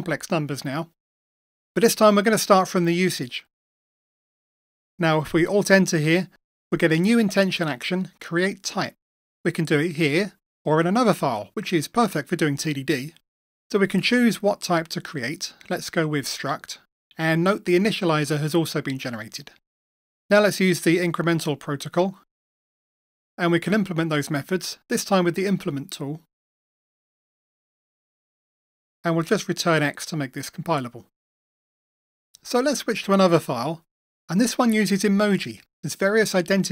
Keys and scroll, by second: 4.5 shift+F2, 6.8 alt+Return, 15.4 Return, 22.3 Return, 26.6 ctrl+i, 31.5 Escape.